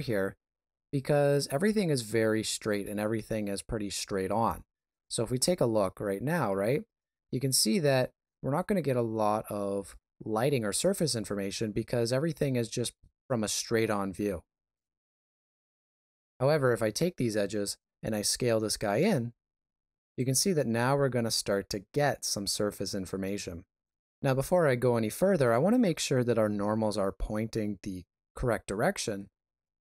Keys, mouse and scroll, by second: 4.3 KP_7, 5.5 Tab, 6.5 alt+a, 15.1 middle click, 16.1 Tab, 17.9 s.